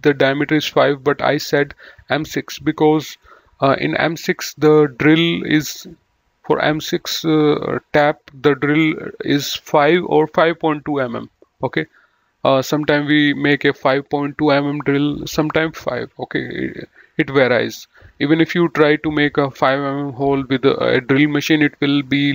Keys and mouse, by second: 2.4 right click, 3.2 click.